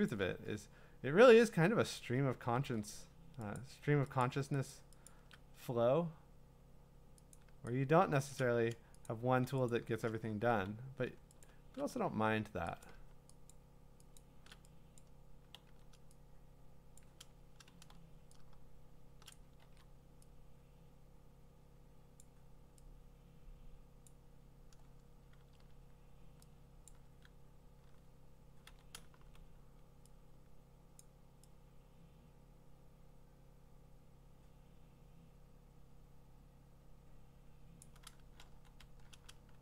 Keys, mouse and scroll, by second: 0.1 shift+click, 2.0 click, 2.6 ctrl+z, 3.6 click, 4.2 shift+click, 4.7 click, 5.1 shift+click, 8.3 alt+click, 9.1 click, 9.7 shift+click, 10.5 x, 11.5 shift+click, 12.1 x, 12.9 click, 13.5 shift+click, 14.2 shift+click, 15.0 click, 17.0 click, 18.5 click, 18.5 x, 19.3 click, 19.7 ctrl+z, 22.2 click, 24.1 click, 26.9 click, 27.1 s, 28.4-29.6 typing, 30.9 x, 31.0 click, 37.8 click, 38.5 x.